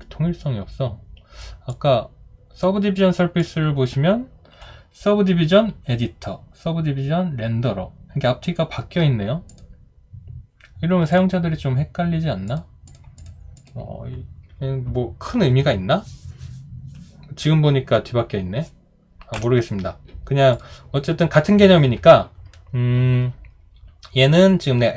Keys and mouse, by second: 19.3 Delete.